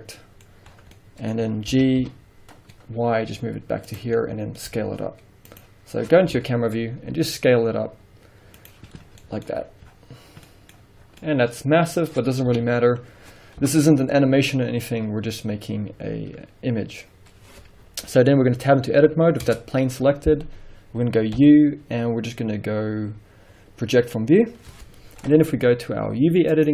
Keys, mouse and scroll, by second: 0.0 middle click, 0.6 scroll down 1, 1.1 middle click, 1.8 g, 4.1 click, 4.3-5.7 middle drag, 4.8 s, 5.7 click, 6.4 KP_0, 7.3 s, 8.8 click, 9.1 scroll down 2, 9.3 scroll up 2, 9.5 middle click, 9.7-10.5 scroll down 1, 10.8 middle click, 10.8 scroll down 2, 11.6 middle click, 11.7 scroll up 1, 12.6 KP_1, 13.7 KP_0, 14.6-15.9 scroll up 1, 19.6 Tab, 19.6-21.1 middle drag, 21.5 u, 25.5-26.7 middle drag.